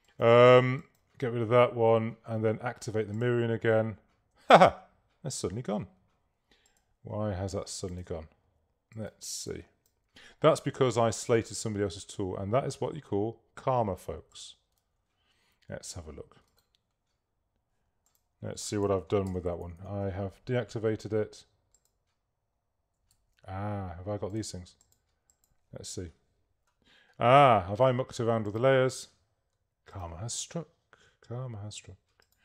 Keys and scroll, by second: 4.8 super+z, 10.4 super+z, 14.9 super+z, 19.4 shift+super+g, 23.3 shift+super+a, 24.0 super+a.